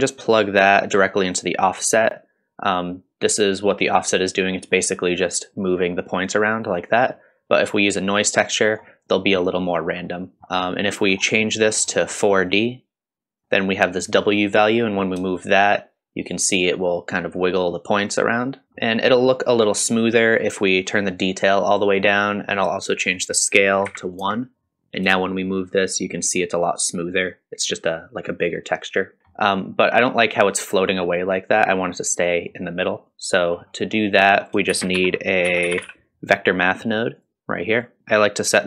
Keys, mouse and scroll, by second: 1.8-5.0 drag, 5.1-8.8 drag, 9.5-10.0 scroll down 2, 10.0-11.1 middle drag, 11.1 scroll up 1, 11.4-11.8 middle drag, 11.8-12.1 scroll up 2, 12.4-13.4 drag, 13.4 scroll up 1, 14.2-18.6 drag, 18.6-21.2 shift+middle drag, 21.2-22.3 drag, 23.1-29.2 drag, 29.2 scroll down 4, 29.3-30.1 middle drag, 33.1 click, 33.5-33.9 scroll up 2, 34.3 click, 34.7 shift+a, 38.0 click.